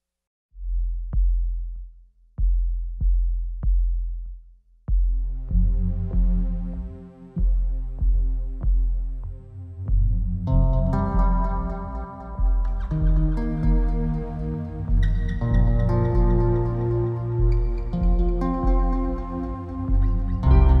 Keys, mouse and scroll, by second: 4.4 scroll down 1, 4.6-5.2 scroll up 1, 6.6-20.8 drag.